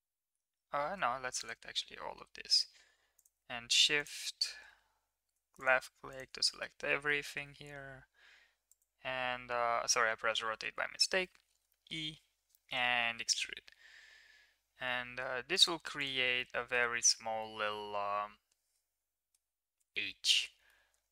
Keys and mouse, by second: 1.3 ctrl+click, 3.1 shift+click, 5.5 shift+click, 6.4 middle drag, 6.8 middle drag, 7.3 r, 9.4 z, 11.6 e, 15.9 drag, 16.4 middle drag, 17.3-19.3 middle drag, 19.9 middle click, 20.6-21.1 middle drag.